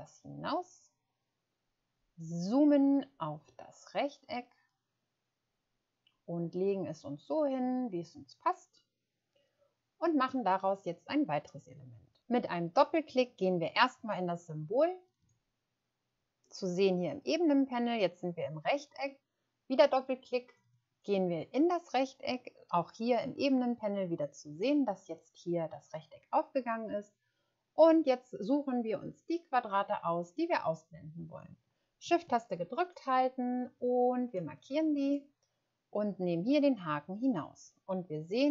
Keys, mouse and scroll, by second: 2.3 click, 20.6 click, 23.5 scroll down 1.